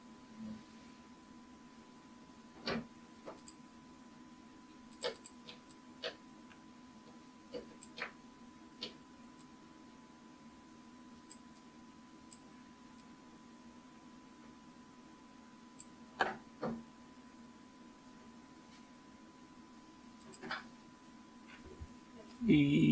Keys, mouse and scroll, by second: 3.5-9.9 drag, 10.0 click, 10.2 click, 10.6-11.6 drag, 12.0-13.2 drag, 20.3 click.